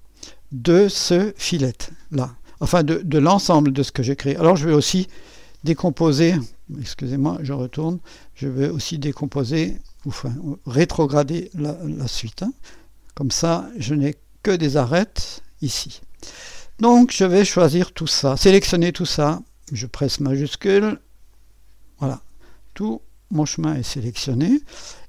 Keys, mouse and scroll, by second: 0.0 click, 4.6 click, 6.9 click, 7.7 click, 9.9 click, 12.4 click, 13.9 click, 14.3-14.8 drag, 15.2 click, 18.4 click, 21.4 click.